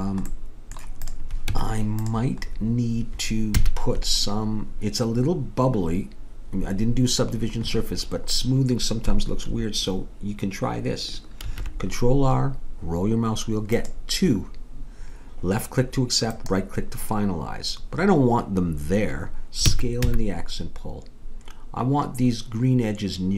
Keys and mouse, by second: 0.3 middle click, 1.0-3.0 drag, 1.5 Tab, 3.6 a, 11.5 ctrl+r, 19.6 s.